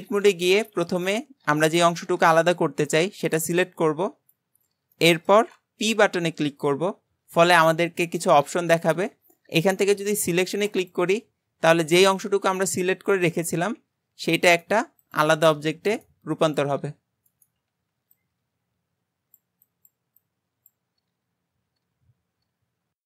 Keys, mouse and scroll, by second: 0.5 alt+z, 1.7 click, 2.5 b, 5.0-6.1 middle drag, 6.1 p, 11.8-12.3 scroll down 3, 12.3 alt+z, 12.7 Tab, 13.1 click, 13.8 g, 15.1 click, 15.3 g, 16.5 click, 16.7 g.